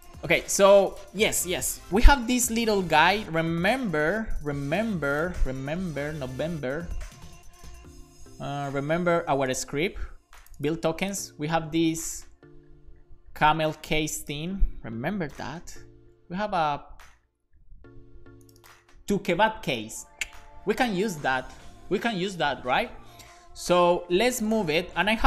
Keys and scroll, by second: 2.2 super+b, 15.4 super+b.